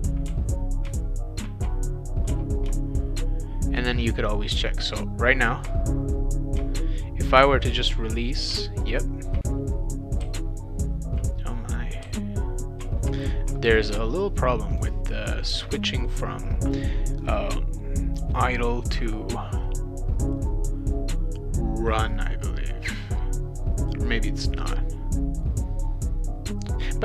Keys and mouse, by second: 0.3 w, 2.3 w, 6.6 shift+w, 8.5 shift+w, 10.2 shift+w, 12.0 shift+w, 14.7 click.